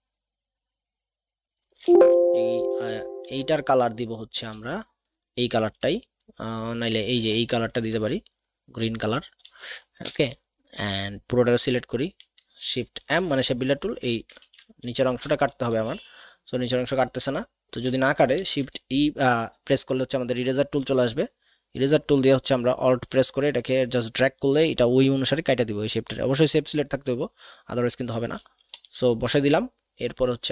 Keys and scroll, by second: 10.0 v, 13.0 shift+m, 14.4 z, 15.1 v, 18.3 shift+e, 18.9 alt+shift+e, 28.7 v.